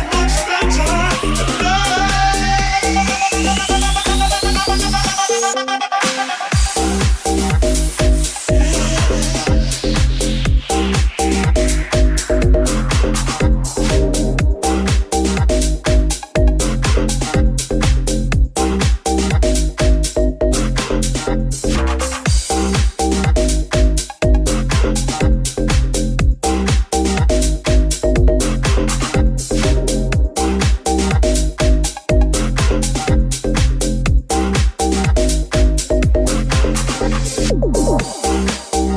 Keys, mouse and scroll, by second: 0.4 Tab, 0.6 right click, 3.8 right click, 8.1 ctrl+a, 9.3 right click, 9.8 Tab, 10.3 ctrl+Tab, 13.7 right click, 14.5 p, 15.1 Tab, 15.4 right click, 16.6 w, 17.0-19.7 middle drag, 18.3 g, 19.9-23.4 ctrl+middle drag, 20.8 r, 22.7 g, 23.4-33.7 middle drag, 23.6 g, 25.5 g, 26.7 r, 29.5 r, 34.2-35.7 middle drag, 35.4 r, 35.7-38.9 middle drag.